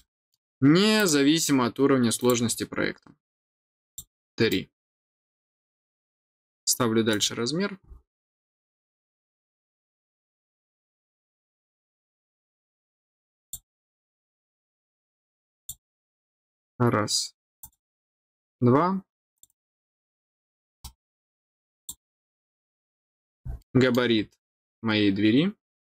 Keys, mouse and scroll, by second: 0.9 click, 2.1 click, 3.8 click, 4.4 middle click, 7.1 click, 12.1-12.5 scroll up 2, 13.4 click, 15.5 click, 17.6 click, 19.3 click, 19.4 click, 20.8 middle click, 21.7 click, 22.7 middle click, 23.5 middle click.